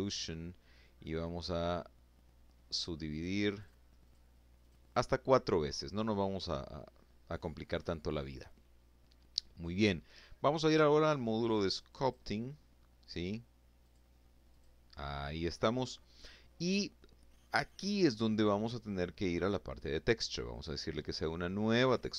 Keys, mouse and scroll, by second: 1.5 click, 2.0 click, 2.5 click, 3.0 click, 12.3 click, 13.0 click, 17.8 click, 19.0 click, 22.0 click.